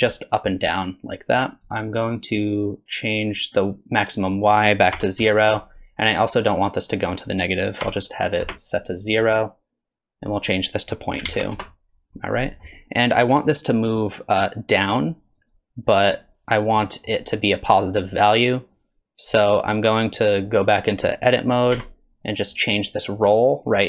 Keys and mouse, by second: 0.3-1.7 drag, 4.3-5.6 drag, 6.9-9.2 drag, 10.3-11.8 drag, 12.1-12.6 middle drag, 14.4-15.5 drag, 16.9 middle click, 21.7 Tab, 23.1-23.8 drag.